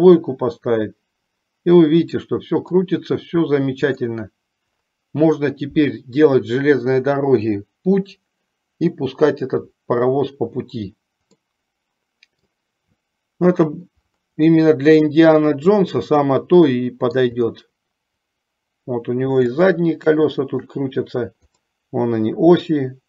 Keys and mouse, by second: 2.5 middle click, 11.6-12.5 middle drag, 15.3-17.5 middle drag, 19.9-21.0 shift+middle drag, 21.9-23.0 middle drag.